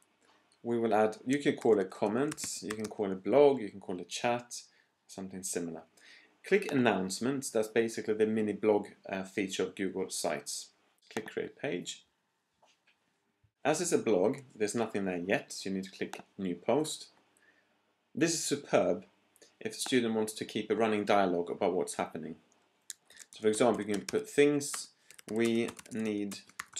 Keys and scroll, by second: 1.3-3.3 typing, 22.8-26.7 typing.